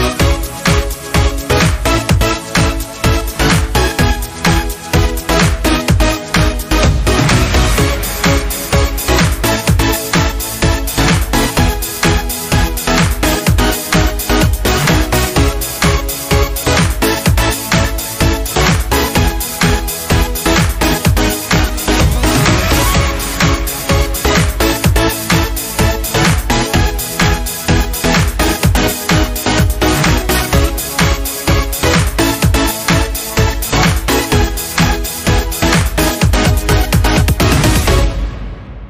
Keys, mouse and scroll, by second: 0.5-13.2 drag, 14.2 scroll down 1, 17.1-24.3 drag, 24.3-25.2 scroll up 1, 25.5 alt+scroll up 1, 28.3 right click, 30.9-33.4 drag, 33.4-34.9 scroll up 1, 34.9-38.1 drag, 38.1 scroll up 1.